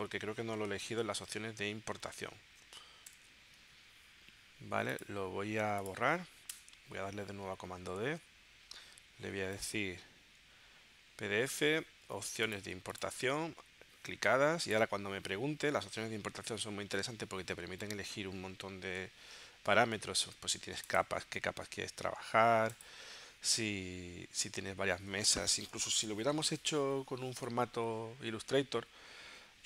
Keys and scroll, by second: 3.1 shift+super+p, 6.6 BackSpace, 7.9 super+d.